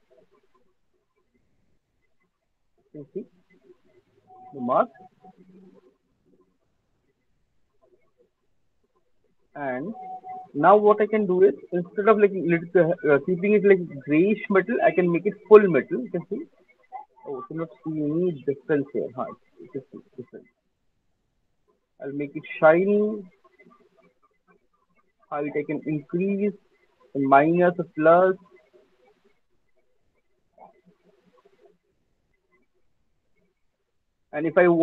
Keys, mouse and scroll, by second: 1.2 alt+click, 2.6 alt+click, 2.6 alt+scroll, 5.7 alt+click, 6.4 click, 7.5 alt+right click, 7.9 alt+middle click, 8.3 alt+click, 8.7 alt+right click, 9.2 alt+right click, 9.5 alt+middle click, 10.5 click, 11.0 middle click, 11.2 alt+middle click, 11.3 middle click, 11.5 scroll, 12.8 alt+middle click, 13.2 scroll, 17.5-28.8 drag, 30.2 middle click, 31.7 alt+click, 32.2 alt+middle click, 33.3 alt+click, 34.0 alt+middle click, 34.4 alt+click.